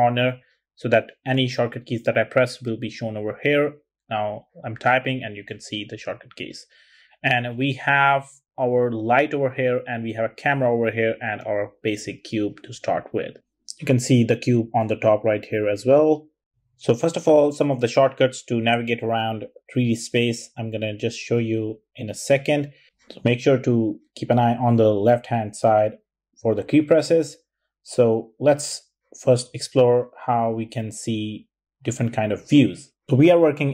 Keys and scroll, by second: 0.6 typing, 3.4-4.5 typing, 6.2 super+z.